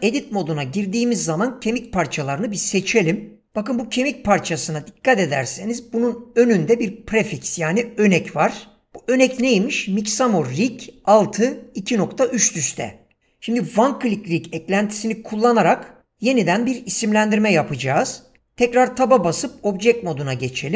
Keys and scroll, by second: 18.9 Tab.